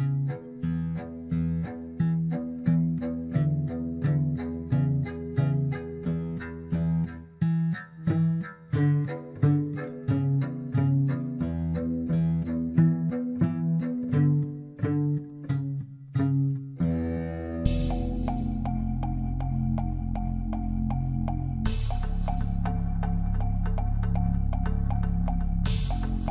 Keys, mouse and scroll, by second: 2.5-3.0 scroll down 2, 3.0-4.8 middle drag, 4.8-7.1 drag, 7.1-7.9 middle drag, 7.9-9.0 scroll up 2, 9.0-11.2 middle drag, 11.2-14.4 drag, 16.1-16.5 scroll down 1, 16.5-18.0 middle drag, 18.0-18.7 scroll up 4, 18.7-19.7 middle drag, 19.7-20.2 scroll down 1, 20.2-22.6 middle drag, 22.6-26.0 scroll up 2.